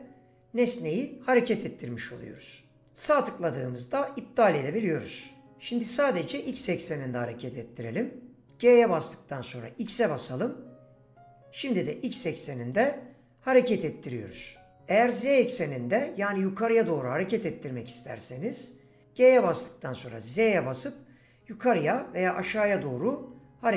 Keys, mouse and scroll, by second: 3.0-8.6 right drag, 8.6 g, 9.8 x, 12.6 right click, 19.4 g, 20.3 z.